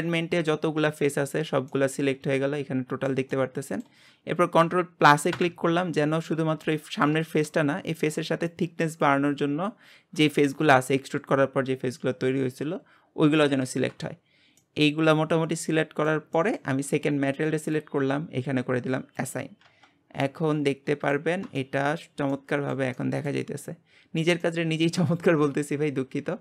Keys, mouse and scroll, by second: 0.2-1.3 shift+middle drag, 1.3-1.7 scroll down 1, 1.7 middle click, 2.1 scroll down 2, 2.4-4.1 shift+middle drag, 4.1-5.3 scroll up 1, 5.3 ctrl+KP_Add, 6.2-6.6 scroll up 1, 6.6 shift+middle click, 7.3-12.2 scroll up 1, 12.2-14.6 scroll up 1, 14.6-17.7 middle drag, 17.7 click, 19.2 click, 19.6 Tab, 19.9-20.2 scroll down 3, 20.2-21.4 middle drag, 21.4 scroll down 1, 21.6-23.7 shift+middle drag, 23.7-24.4 scroll up 2, 24.4-25.5 shift+middle drag, 25.5-26.4 scroll up 1.